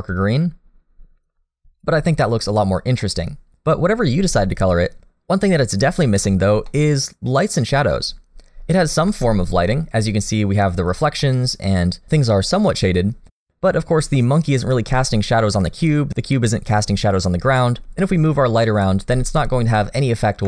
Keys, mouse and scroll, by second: 3.0 middle click, 6.7 middle click, 9.1 alt+a, 9.7 middle click, 11.2 middle click, 13.1 middle click, 15.4 middle click, 17.1-17.6 scroll down 2, 17.6 middle click, 18.5 click, 19.1 g.